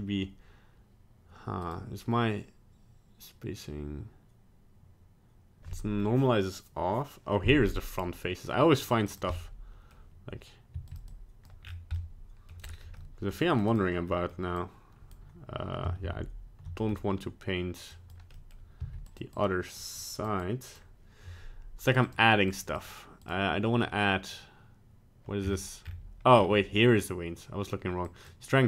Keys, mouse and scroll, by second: 1.6 click, 8.8 click, 9.2 click, 9.3 middle click, 9.8 middle click, 10.7 f, 11.1 click, 11.6 scroll down 4, 11.9 middle click, 12.6 scroll up 2, 12.9 middle click, 13.5 click, 13.7 click, 14.0 middle click, 14.6 click, 16.1 ctrl+z, 16.7 middle click, 17.9 click, 18.3 middle click, 18.8 f, 19.4 click, 20.0 click, 20.4 click, 22.0 click, 22.7 click, 25.4-26.2 scroll up 10, 26.2-27.9 scroll down 5, 28.0 click.